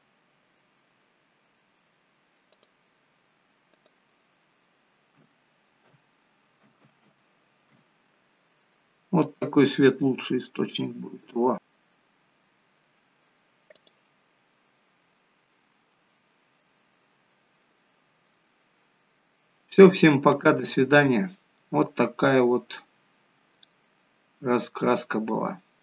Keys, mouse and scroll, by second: 2.6 click, 3.8 click, 7.8 0, 8.9 scroll down 1, 9.8-10.4 scroll down 3, 10.4-11.0 scroll down 4, 11.1 scroll up 3, 11.6 click, 11.6 middle click, 12.8-13.4 scroll up 1, 13.9 click, 15.2 shift+middle click, 16.7 middle click, 21.7 middle click.